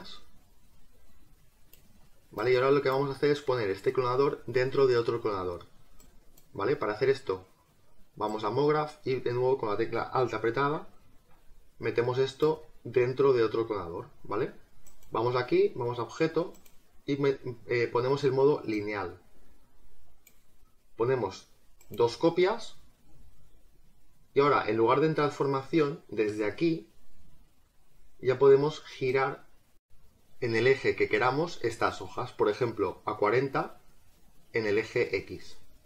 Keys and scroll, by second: 30.5 ctrl+z.